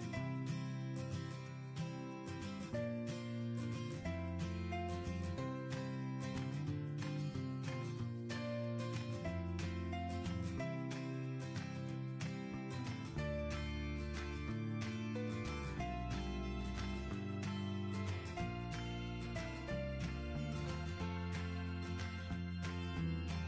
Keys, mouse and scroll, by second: 4.9 l.